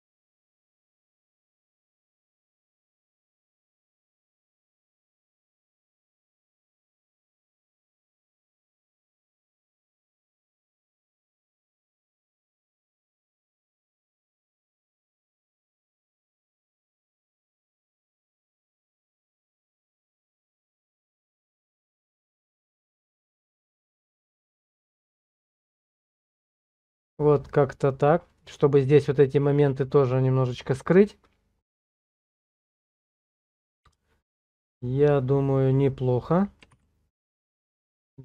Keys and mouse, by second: 18.8 ctrl+middle click, 23.3 shift+middle click, 36.7 Page_Down.